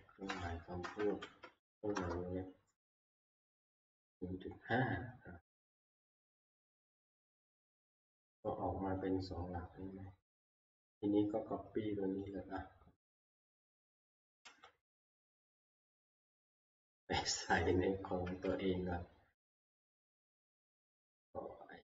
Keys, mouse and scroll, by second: 0.0-1.6 typing, 2.0 Return, 10.5 click, 14.0 click, 14.4 ctrl+c, 16.5 click, 17.2 click, 18.3 alt+Tab, 19.6 alt+Tab, 19.8 alt+Tab, 20.8-21.8 scroll down 12.